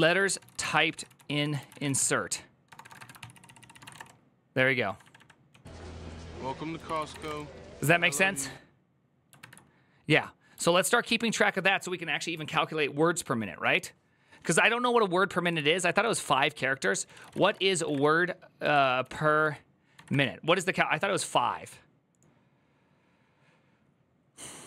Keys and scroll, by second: 0.0-7.4 typing, 6.6 ctrl+c, 9.2 alt++, 10.4 alt+{, 10.9 alt++, 15.2 alt+l, 15.7 ctrl+t, 16.6-20.4 typing.